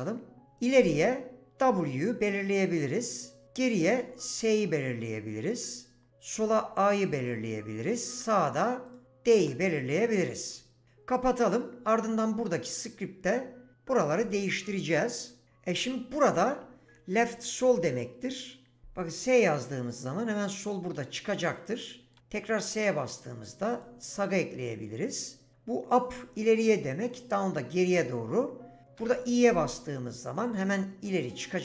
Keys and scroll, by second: 1.6 w, 3.8 s, 6.4 a, 9.4 d, 17.7 s, 22.2 s, 29.0 i.